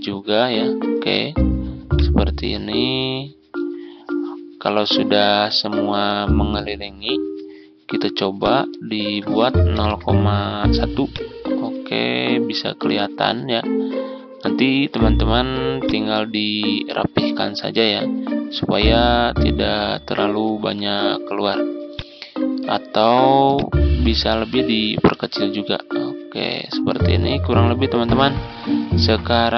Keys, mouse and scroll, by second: 5.1 ctrl+scroll down 1, 8.3-9.6 drag, 9.6 0, 10.9 click, 12.0 ctrl+scroll up 1, 13.4-13.8 ctrl+scroll up 1, 14.4 ctrl+scroll down 1, 15.8 click, 16.6-17.2 ctrl+scroll down 2, 18.6 ctrl+scroll up 1, 21.8-25.1 drag, 25.6-26.2 scroll up 1, 27.8 Down.